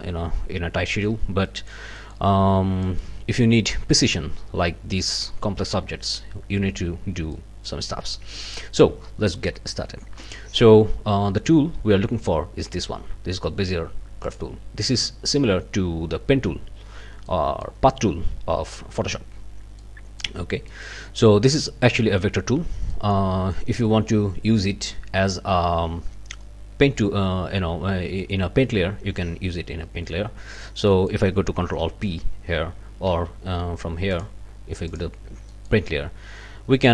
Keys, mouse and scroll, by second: 1.0 scroll down 2, 1.5 middle click, 2.0 middle click, 2.4 scroll up 2, 2.8 middle click, 7.3 click, 14.3 click, 17.3 click, 19.8 click, 20.7 click, 22.9 click, 30.9 click, 31.8 ctrl+alt+p, 33.1 ctrl+z, 34.1 click, 34.9 click, 35.5 click.